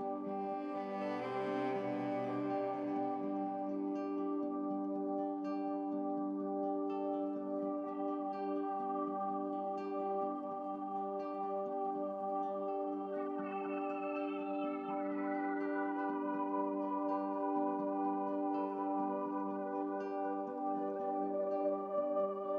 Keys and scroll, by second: 13.6-14.4 typing, 19.0-21.2 typing.